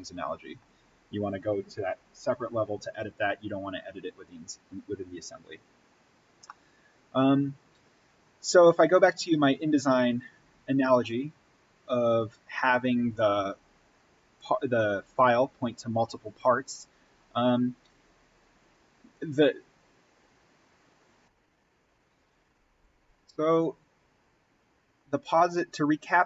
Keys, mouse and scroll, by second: 4.4-6.2 scroll up 1, 6.6-11.3 middle drag, 11.3-12.6 scroll down 1, 12.6-17.2 middle drag, 21.1 click.